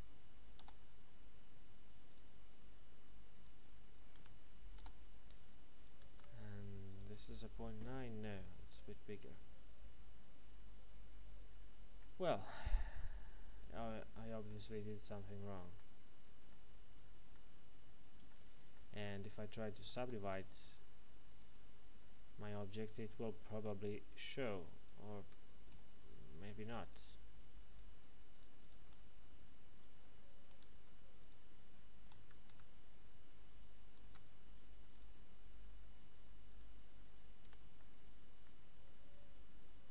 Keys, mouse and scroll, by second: 0.6 Return, 2.1 right click, 3.3 shift+right click, 4.6 alt+m, 4.7 Return, 5.7 right click, 6.2 ctrl+Tab, 6.5 click, 6.9 right click, 7.8 middle click, 14.4 middle click, 17.8-18.3 scroll down 1, 18.3 middle click, 19.9 ctrl+2, 20.5 Tab, 21.8-22.3 scroll up 1, 22.3 middle click, 24.3 right click, 25.2 shift+right click, 25.7 f, 26.8 right click, 27.6 shift+right click, 29.9 f, 30.8 ctrl+Tab, 31.2 right click, 32.1 Escape, 33.3 click, 34.1 ctrl+Tab, 34.4 click, 34.9 right click, 36.5 shift+right click, 37.4 z, 37.7 middle click.